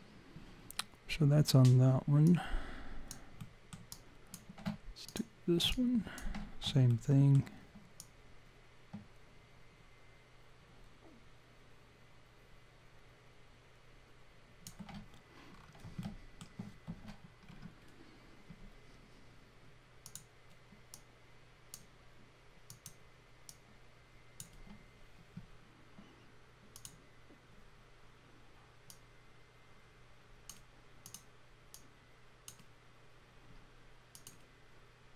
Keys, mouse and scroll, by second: 2.3 alt+click, 3.4 alt+middle click, 3.9 alt+click, 5.1 click, 5.7 alt+click, 6.9 alt+middle click, 8.0 alt+click, 15.5 scroll down 5, 16.0 alt+middle click, 17.5-17.8 scroll up 2, 18.7-19.0 scroll up 1, 20.1 click, 20.9 click, 22.7 click, 23.5 click, 26.7 click, 28.9 click, 31.0 click, 31.7 click, 34.1 click.